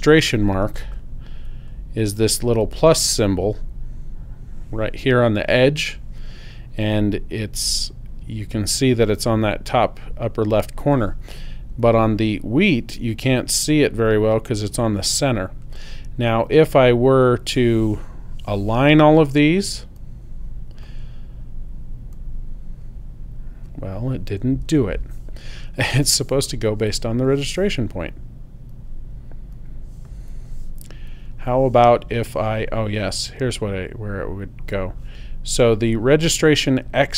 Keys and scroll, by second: 24.7 super+z.